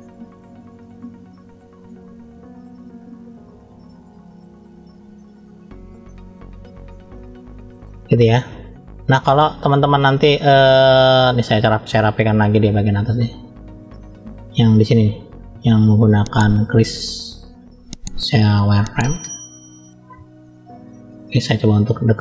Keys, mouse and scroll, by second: 0.3 click, 1.1 click, 1.4 middle click, 2.3 click, 3.0 click, 3.8 click, 4.2 click, 4.5 click, 4.8 click, 5.0 click, 5.9 middle click, 6.9 middle click, 7.9 scroll up 1, 8.5 shift+middle click, 9.4-10.0 scroll up 1, 10.0 middle click, 10.0 scroll up 1, 12.1-13.4 drag, 16.4 click, 17.6-19.8 drag, 20.2 middle click, 21.3-22.2 scroll up 2, 21.8 shift+middle click.